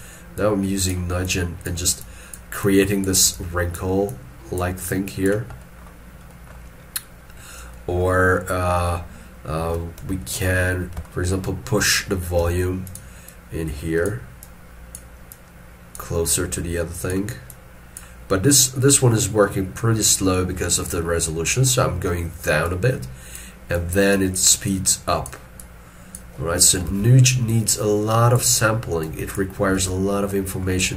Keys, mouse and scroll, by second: 10.2 shift+middle click, 11.1 shift+middle click, 12.4 f, 13.3 double click, 26.9 alt+e, 29.8 alt+e, 30.3 middle click.